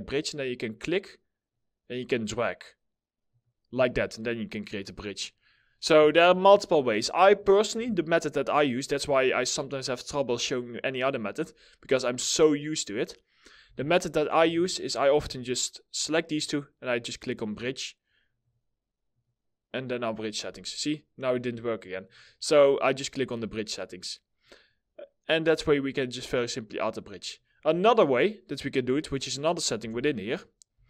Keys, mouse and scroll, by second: 5.6 w, 7.2 4, 13.2 Delete, 13.9 2, 15.5 ctrl+click, 23.4 middle click, 29.4 4, 30.2 Delete.